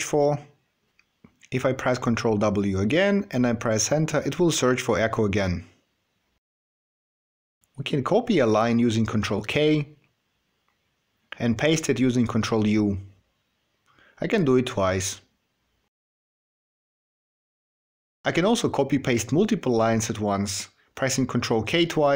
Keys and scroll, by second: 1.9 ctrl+w, 10.3 ctrl+k, 13.2 ctrl+u, 20.6 ctrl+k.